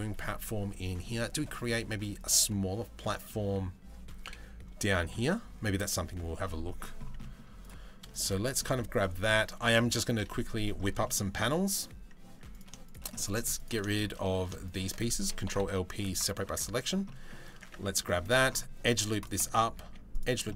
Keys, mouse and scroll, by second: 0.5 middle click, 1.1 Tab, 1.2 middle click, 2.8-3.2 middle drag, 3.8 KP_7, 6.0 middle click, 6.8 middle click, 8.0 middle click, 8.2 Tab, 10.6 middle click, 12.1 click, 12.4 shift+middle click, 12.7 middle click, 13.5 shift+middle click, 13.8 middle click, 15.1 ctrl+l, 15.2 p, 16.1 Tab, 16.7 middle click, 17.3 Tab, 17.5 middle click, 17.8 ctrl+r, 19.4 ctrl+r, 20.1 middle click.